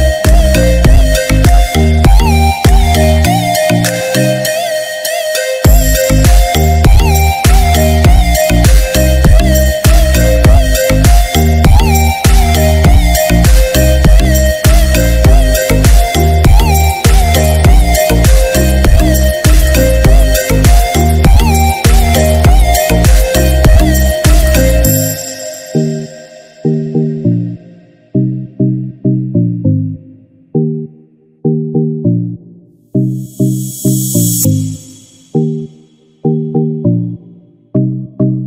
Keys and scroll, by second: 5.3 ctrl+=, 5.7 ctrl+-, 18.1 ctrl+=.